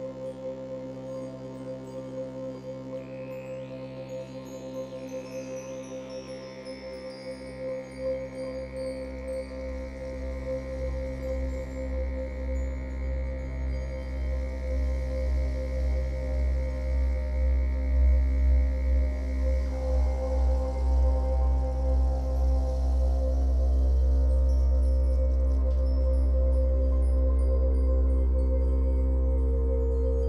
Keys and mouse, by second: 0.0 click, 0.3 click, 2.4 click, 3.9 right click, 4.9 click, 6.6-7.2 drag, 8.2-8.8 drag, 9.3 click, 11.6 click, 13.1 click, 15.2 click, 15.7 click, 16.4 typing, 17.1 click, 17.5 typing, 18.3 click, 20.2-21.2 typing, 21.5 Return, 23.7 s, 26.6 click, 28.0 g.